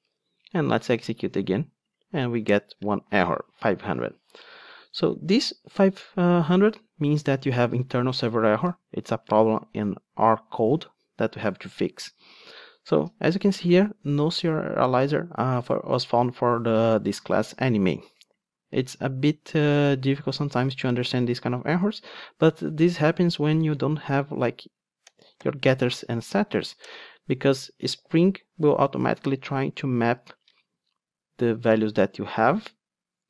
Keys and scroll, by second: 25.4 super+n.